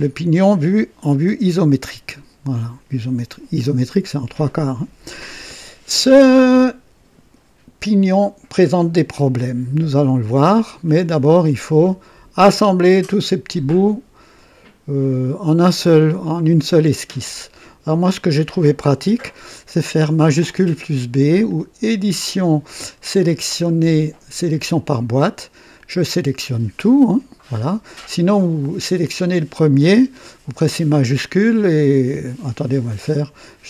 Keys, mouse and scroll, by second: 1.2 KP_0, 10.8 click, 12.9-18.3 drag, 21.4 click, 24.7 click, 25.8-27.0 drag, 33.4 click.